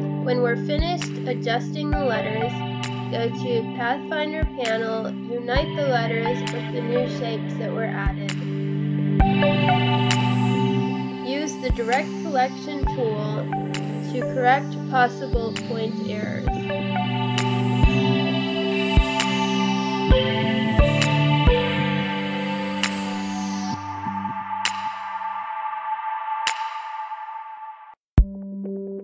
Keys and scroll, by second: 0.1 space, 0.8 space, 3.0 space, 5.0 ctrl+z, 5.1 space, 8.6 space, 11.3 space, 12.9 space, 14.5 space, 16.5 space, 17.6 space, 18.3 space, 20.9 space, 22.1 space, 23.5 Delete, 25.1 space, 25.8 space, 27.0 ctrl+z, 28.1 a.